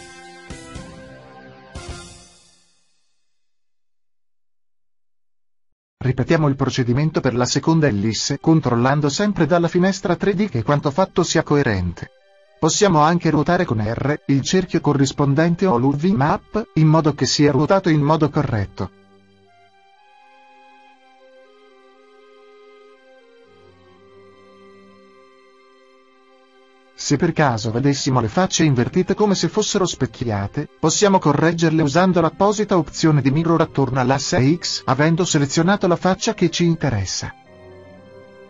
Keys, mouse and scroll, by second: 3.6-5.6 drag, 7.8 l, 10.2 g, 13.5-15.1 drag, 14.8 s, 15.3 click, 17.4-19.0 drag, 19.0 s, 19.1-20.8 drag, 22.5-24.3 drag, 24.3-26.1 middle drag, 32.7-35.7 drag.